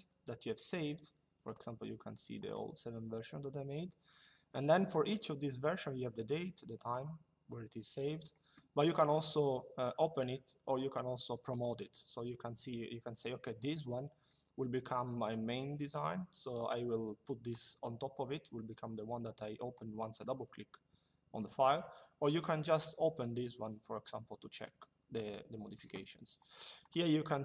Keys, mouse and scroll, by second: 1.1 click, 26.5 click.